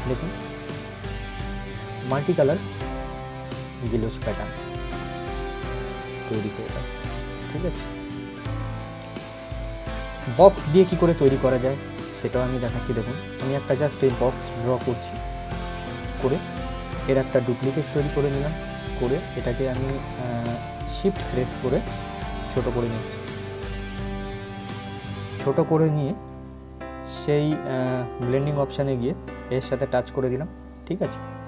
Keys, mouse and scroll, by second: 2.8 ctrl+g, 3.1-8.4 drag, 9.0 scroll up 1, 9.4-17.0 drag, 17.0 right click, 17.4 click, 19.9 ctrl+shift+z, 21.0-25.8 shift+drag, 27.6-31.4 drag.